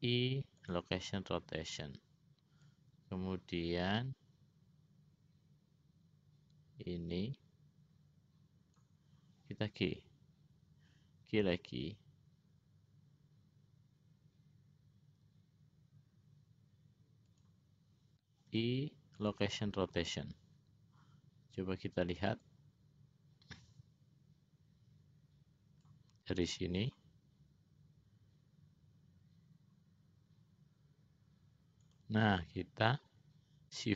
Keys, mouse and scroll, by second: 0.0 i, 2.9-9.3 drag, 11.6 g, 18.6 |, 22.7-26.2 drag, 27.0 click, 32.1 click, 33.0 click.